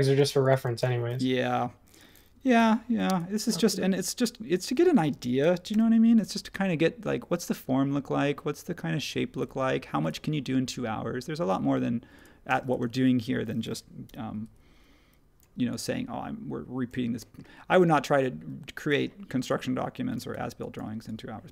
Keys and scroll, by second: 0.2 space, 2.5 m, 4.7 ↺, 5.2 space, 9.4 ↻, 12.5 space, 14.0 p, 20.2 typing.